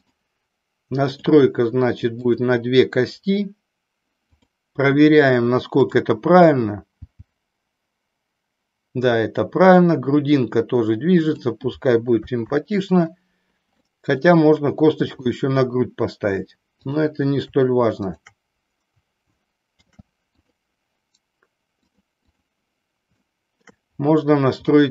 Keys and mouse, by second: 0.0 ctrl+shift+drag, 1.1 click, 4.3 click, 5.8 click, 6.9 g, 11.4 drag, 12.4 ctrl+z, 13.9 middle click, 15.1-15.8 middle drag, 16.8-17.5 drag, 18.0 shift+click, 21.9 click, 22.3 click, 23.1-23.9 shift+middle drag, 24.6-24.9 middle drag.